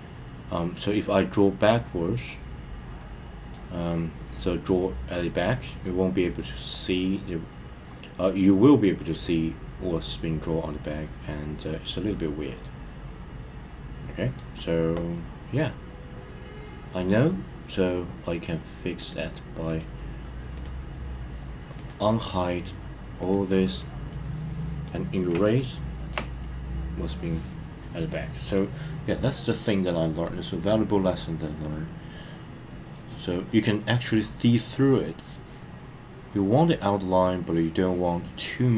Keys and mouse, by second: 4.6-6.6 middle drag, 8.4-14.3 middle drag, 15.0-17.1 middle drag, 18.2 click, 18.9 click, 19.6 click, 20.5 click, 21.8 drag, 23.1 click, 24.0-24.8 middle drag, 25.4-26.1 shift+middle drag, 26.4-27.0 middle drag, 30.1-31.7 drag, 32.8 click, 37.4 click.